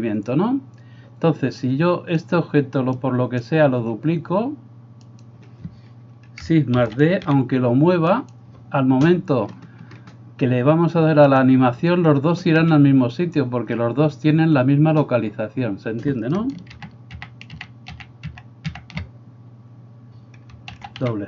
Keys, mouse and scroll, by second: 6.8 shift+d, 7.4 g, 9.5-12.6 middle drag, 11.4-12.6 drag, 12.6 Escape, 15.6-16.5 drag, 15.6-16.5 middle drag, 15.6-16.5 right drag, 16.6-21.2 ctrl+drag, 16.8 ctrl+z, 17.3 ctrl+z, 17.6 ctrl+z, 18.0 ctrl+z, 18.4 ctrl+z, 18.8 ctrl+z, 20.8 shift+d.